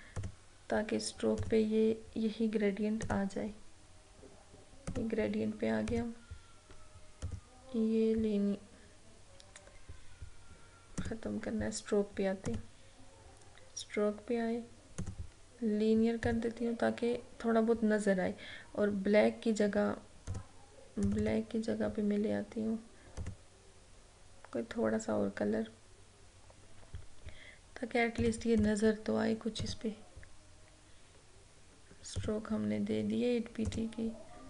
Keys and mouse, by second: 11.1 click, 15.1 click, 20.4 click, 28.3 click, 32.2 click.